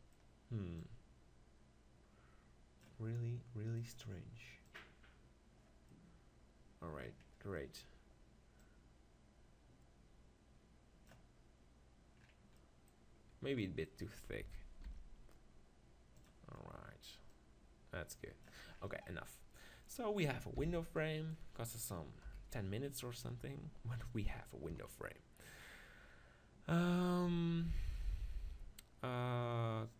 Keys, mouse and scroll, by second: 4.8 click, 5.9-8.6 middle drag, 8.6-10.5 drag, 12.2-14.5 middle drag, 14.4 s, 16.3-17.8 drag, 18.0-19.2 drag, 19.2-22.2 middle drag, 20.6 b, 22.2 KP_1, 23.2 middle click, 24.8 KP_7.